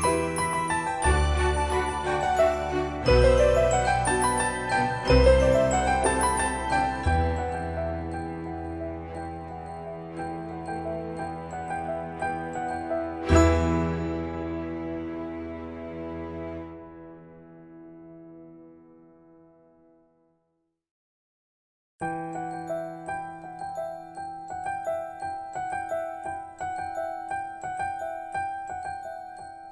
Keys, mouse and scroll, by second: 0.9 click, 1.7-2.3 scroll down 1, 2.5 shift+middle click, 4.2-5.3 scroll up 1, 5.3 click, 7.9 space, 8.4 click, 9.6 8, 10.2 Return, 11.3 Escape, 12.1 scroll down 1, 12.7-14.1 shift+middle drag, 14.5 scroll down 1, 16.3 click, 18.4 middle click, 19.0-20.3 scroll up 1, 20.3 scroll down 1, 22.1 click, 26.1 Escape, 26.6-27.3 scroll up 1, 27.3 scroll down 1, 28.4-29.7 scroll up 1.